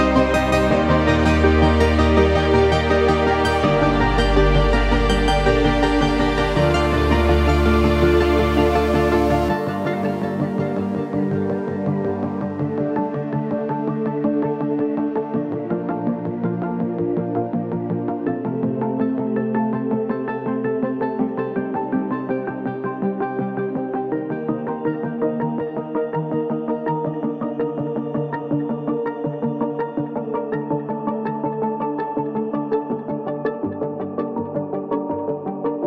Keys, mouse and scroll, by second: 0.3 shift+click, 2.0-5.0 shift+drag, 5.1 click, 5.1 typing, 6.4 ctrl+space, 6.5 ctrl+click, 6.6-7.2 typing, 8.2-9.7 alt+drag, 9.7 ctrl+t, 9.8 Up, 10.5 Down, 10.6 click, 11.0 t, 12.4 click, 13.8 ctrl+c, 14.0 click, 15.0 ctrl+v, 16.3-18.7 drag, 20.0 click, 24.0 click, 24.1 space, 24.2 ctrl+click, 24.8-26.0 ctrl+drag, 26.0 ctrl+click, 26.3 ctrl+space, 26.6 click, 30.1-35.8 drag.